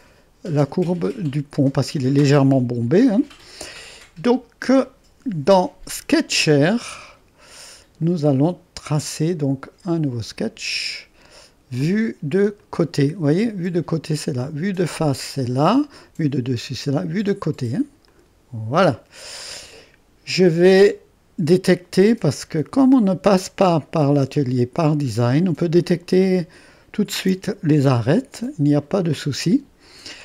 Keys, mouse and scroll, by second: 0.0-1.2 drag, 2.2-8.4 drag, 9.0-11.6 drag, 12.6-13.7 drag, 18.1 click, 25.4-27.7 drag.